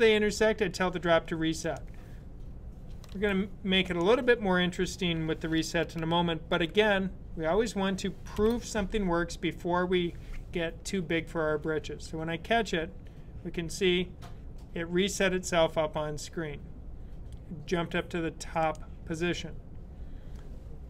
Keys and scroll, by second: 2.9 super+s, 8.2 b.